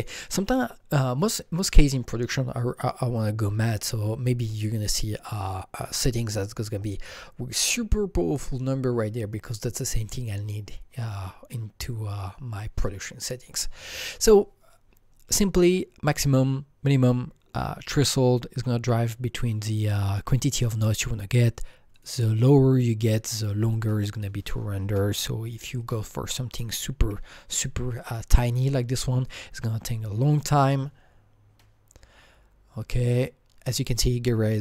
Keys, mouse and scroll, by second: 21.9 click, 22.1 double click, 24.8 double click, 24.8 KP_0, 25.8 KP_0, 27.0 KP_2, 28.0-29.0 drag, 30.3 click.